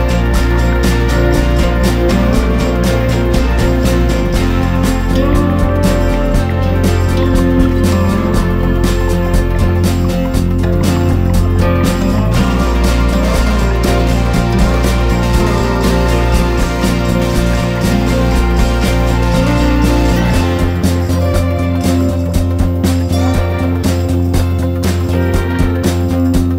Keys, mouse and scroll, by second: 3.2 F4, 3.7 click, 6.0 F4, 6.3 click, 11.0 F4, 11.5 click, 15.2 click, 16.7 F4, 17.0-18.9 drag, 19.3 ctrl+g, 20.0 click, 21.1 Down, 21.2 typing, 24.2 click.